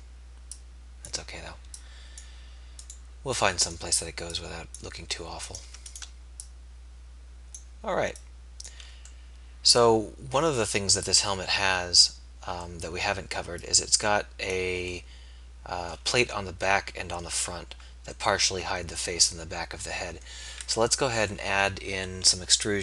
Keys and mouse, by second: 11.0-14.0 middle drag, 16.3 Tab, 17.4 Tab, 20.7 KP_1.